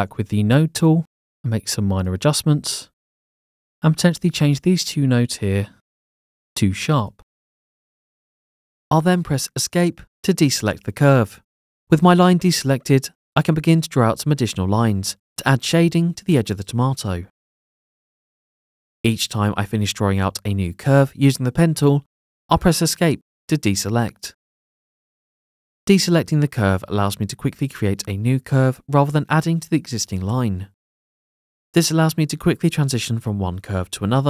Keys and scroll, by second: 0.1 a, 9.7 Escape, 12.6 Escape, 14.0 Escape, 16.0 Escape, 17.5 Escape, 18.9 Escape, 20.4 Escape, 23.2 a, 24.8 p, 25.2 Escape, 26.6 Escape, 28.2 Escape, 29.8 Escape, 31.6 Escape, 32.9 Escape.